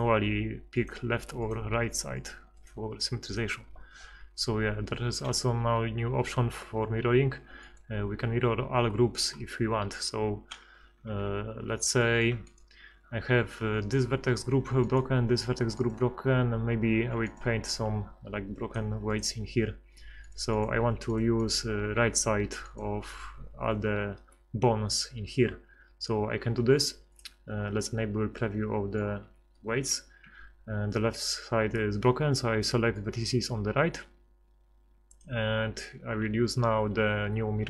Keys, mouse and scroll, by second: 6.1 ctrl+x, 9.9 KP_1, 10.7 z, 11.3 ctrl+z, 11.5 ctrl+z, 19.1-20.2 drag, 20.6-22.7 drag, 25.3 KP_1, 30.3 a, 32.4 b.